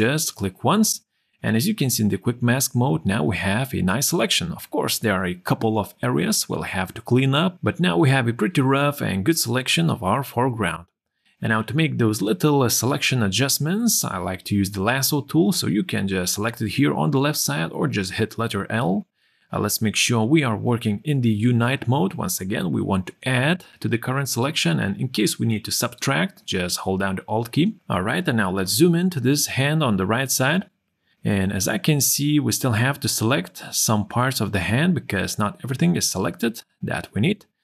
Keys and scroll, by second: 0.0 q, 5.5 q, 8.3 ctrl+0, 28.0 z, 33.3 q, 36.8 q.